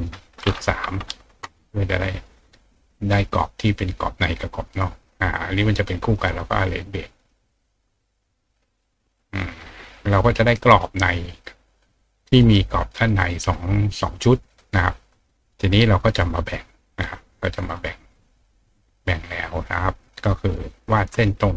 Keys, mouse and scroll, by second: 7.2 click, 9.0 click, 9.5 click, 10.5 click, 11.8 click, 12.4 right click, 13.3 right click, 14.8 click, 17.0 click, 20.0 click, 20.8 click.